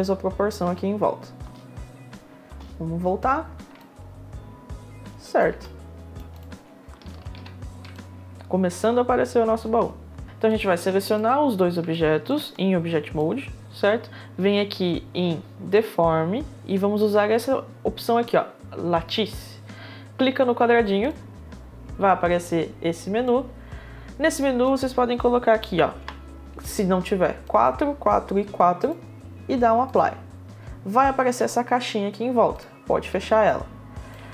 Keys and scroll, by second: 1.0 space, 5.0 space, 7.4 1, 10.0 1, 27.1 4, 33.7 4.